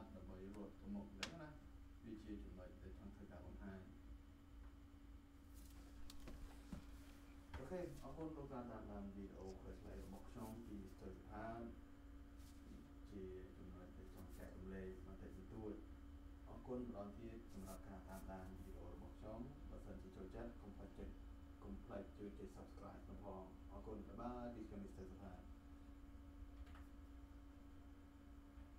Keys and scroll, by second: 26.6 alt+KP_2.